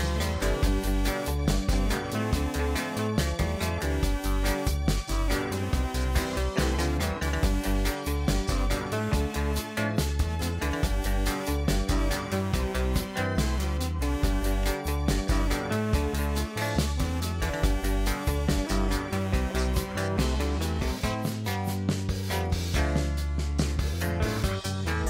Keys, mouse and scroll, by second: 1.2-4.8 right drag, 5.8 click, 9.6 click, 9.8-10.5 middle drag, 10.5 click, 11.5 click, 12.7-13.3 scroll down 1, 13.6-15.6 drag, 15.8-16.3 middle drag, 16.3 scroll down 1, 16.4 middle click, 17.2 click, 17.5-18.0 middle drag, 18.0-18.5 scroll up 1, 18.5-18.9 scroll down 4, 18.9-20.7 shift+middle drag, 20.7-21.2 scroll up 1, 21.2-22.3 scroll down 1, 22.3 KP_0, 23.0-23.8 scroll down 1, 23.8 shift+a.